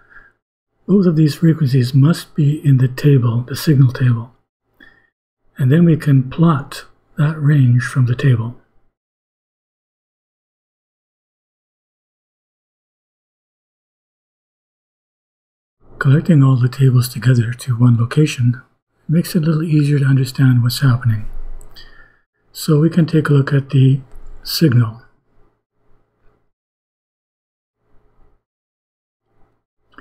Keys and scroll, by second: 20.8 BackSpace, 26.7 ;.